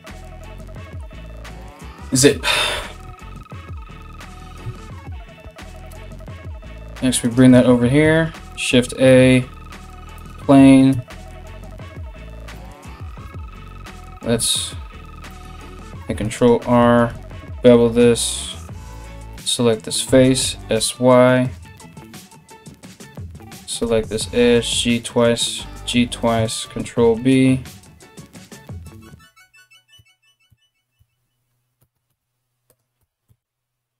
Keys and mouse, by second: 2.7 Tab, 3.1 Tab, 4.2 KP_1, 5.8 g, 7.9 shift+a, 10.5 Tab, 12.9 2, 13.1-16.1 right drag, 14.0 ctrl+z, 15.6 ctrl+r, 16.1-18.9 ctrl+middle drag, 16.7 ctrl+b, 18.5 3, 18.9 right click, 19.1-33.9 middle drag, 19.7 s, 21.6 right click, 22.4 2, 22.7 right click, 23.4 g, 24.6 alt+right click, 25.2 g, 26.3 ctrl+b, 30.6 a, 31.4 g, 32.6 g.